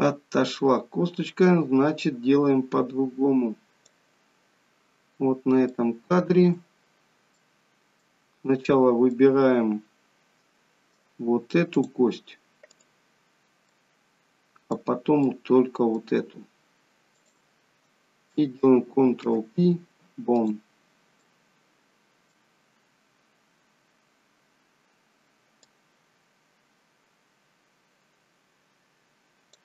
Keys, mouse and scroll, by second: 4.9-6.0 scroll up 1, 6.0 shift+middle click, 6.0-7.5 scroll up 2, 7.5 middle click, 9.1 middle click, 11.7 click, 12.7 click, 13.7 middle click, 15.3 middle click, 17.2 shift+click, 19.2 ctrl+p, 21.3 middle click, 22.5 scroll down 2, 25.9 click.